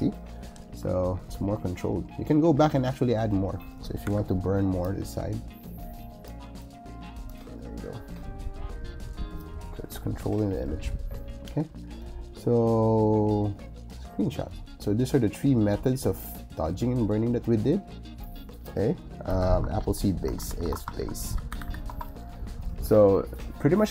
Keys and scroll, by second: 4.0 o, 19.7-22.0 typing.